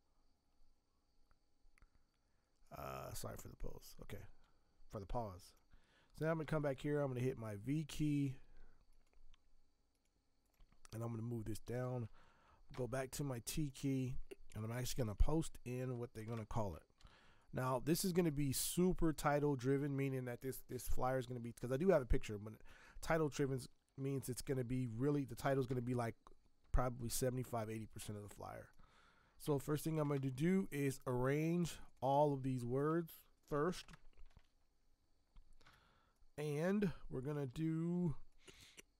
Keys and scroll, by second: 6.4 v, 7.6 alt+Tab, 8.2 alt+Tab, 12.7 t, 14.9 ctrl+v, 16.2 ctrl+Return, 17.0 v, 23.8 t, 25.4 space, 30.0 ctrl+Return, 33.5 ctrl+x, 33.8 ctrl+Return, 35.6 v, 37.5 t.